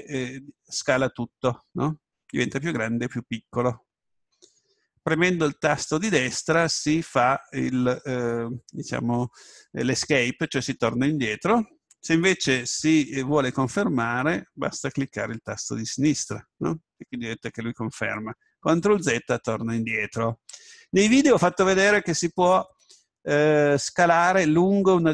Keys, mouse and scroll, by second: 6.2 right click, 12.8 s, 16.2-19.9 drag, 19.9 ctrl+z.